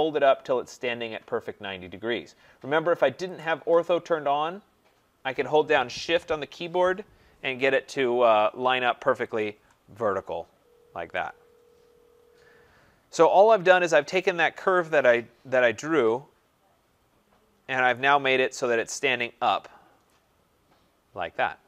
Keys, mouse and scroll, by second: 3.4 click, 9.4 shift+click, 10.5 middle click, 10.6 middle click, 10.7 middle click, 13.1 right click, 13.4 middle click, 13.4 middle click, 13.5 middle click, 17.9 right click, 20.3-21.6 right drag.